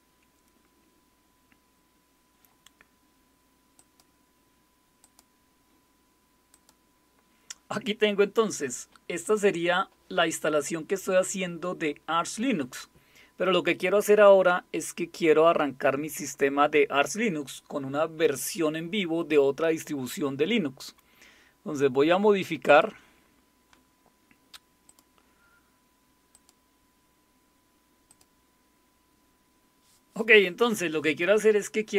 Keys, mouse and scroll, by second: 3.8 click, 5.0 click, 6.5 click, 9.2 click, 22.7 click, 24.9 click, 26.3 click, 28.1 click.